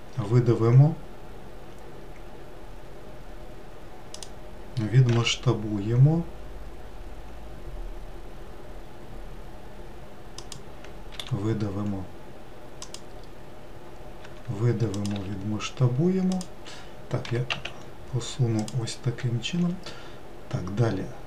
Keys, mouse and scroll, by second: 4.8 s, 10.8 e, 13.9 e, 17.0 g, 19.3 e.